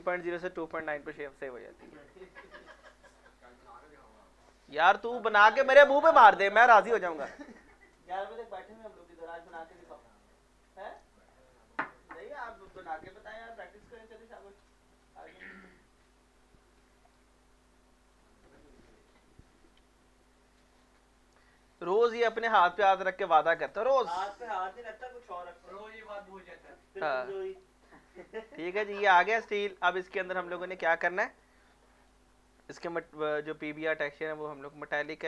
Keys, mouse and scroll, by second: 3.4-7.0 drag, 14.4-18.1 drag, 18.1 click, 19.1 Delete, 20.7 click, 24.9 middle click, 25.2-25.6 scroll up 1, 25.6-26.8 drag, 26.8-28.9 drag, 28.9 middle click, 29.5 scroll up 1, 30.5 scroll up 1, 32.0 click, 35.0 click.